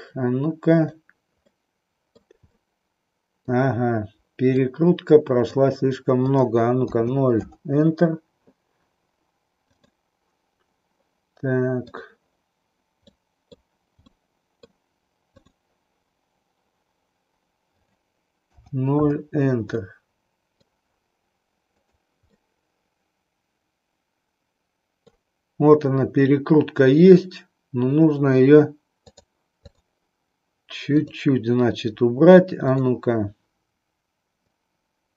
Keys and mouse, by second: 0.6 click, 1.4 middle click, 2.5-3.5 middle drag, 4.6-5.6 drag, 6.2-7.7 drag, 9.7 click, 11.7 click, 13.1 middle click, 14.1 middle click, 15.4 click, 17.9-19.1 drag, 19.7-20.7 middle drag, 22.4-25.0 middle drag, 31.0 click, 32.6 click, 34.4-35.1 drag.